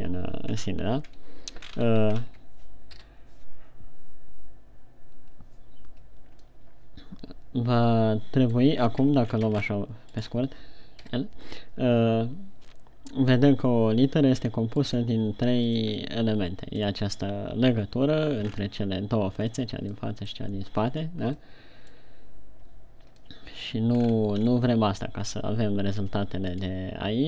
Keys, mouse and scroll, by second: 1.1 scroll up 1, 1.4 scroll down 1, 2.1 scroll up 4, 2.6 shift+scroll down 2, 3.3 o, 7.0 middle click, 9.6-10.0 shift+scroll down 9, 10.2-10.6 scroll up 4, 10.7 right click, 11.8 l, 12.2 middle click, 15.7-16.0 scroll down 4, 16.3 middle click, 16.8 middle click, 19.0-19.7 scroll up 5, 20.7 middle click, 21.6-22.0 scroll down 2, 22.3 middle click, 22.8-23.1 scroll down 1, 23.9 middle click, 24.5 scroll up 3, 24.7-25.3 scroll down 3.